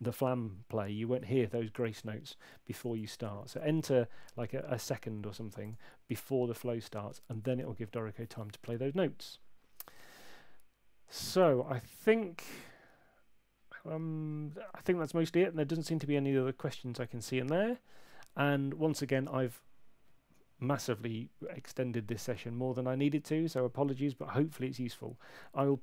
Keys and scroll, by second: 2.8 BackSpace, 2.8 1.